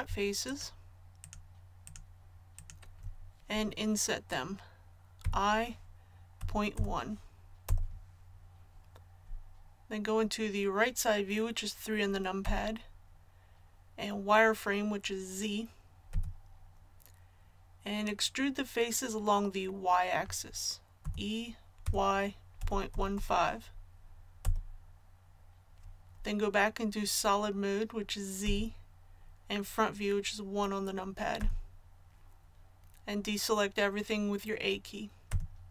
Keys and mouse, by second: 5.2 i, 12.4 KP_3, 16.1 z, 21.0 e, 28.4 z, 31.4 KP_1, 35.3 a.